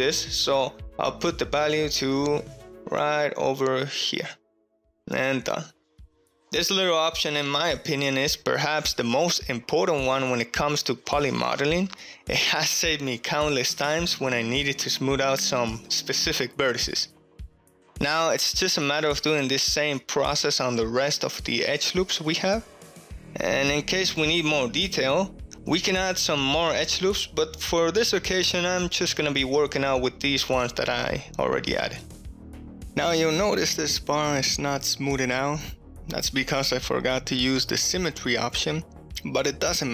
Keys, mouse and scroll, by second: 1.5-4.6 drag, 4.6-6.4 middle drag, 5.8 click, 5.8 right click, 7.2 middle click, 8.0-9.7 drag, 8.0-10.2 middle drag, 8.0-9.7 right drag, 11.0-13.1 middle drag, 17.8 ctrl+z, 17.8 ctrl+middle click, 18.3 middle click, 18.6-23.2 typing, 19.0 alt+click, 19.6 right click, 20.0 alt+click, 20.3 right click, 20.5 ctrl+middle click, 20.9 alt+click, 21.1 right click, 21.3 middle click, 21.6 alt+click, 21.8 right click, 21.9 middle click, 22.1 alt+click, 22.3 click, 22.3 right click, 22.5 click, 22.8 alt+click, 23.0 click, 23.0 right click, 23.3 alt+click, 23.7 middle click, 23.8 middle click, 23.9 click, 23.9 right click, 24.1 ctrl+middle click, 24.6 KP_7, 24.7 2, 25.0 alt+click, 25.1 ctrl+shift+middle click, 25.5 g, 25.8 click, 25.9 2, 26.1 alt+click, 26.4 shift+middle click, 27.0 alt+click, 27.2-29.1 typing, 27.8 click, 27.8 shift+middle click, 28.0 shift+middle click, 28.4 alt+click, 29.1 click, 29.2 alt+click, 29.4 middle click, 29.7 ctrl+shift+middle click, 30.3 KP_3, 30.4 KP_3, 31.2 alt+z, 31.2 KP_1, 31.6 alt+z, 31.7 alt+z, 31.9 alt+z, 32.1 ctrl+shift+middle click, 33.1 shift+middle click, 35.3 middle click, 38.2-39.8 middle drag.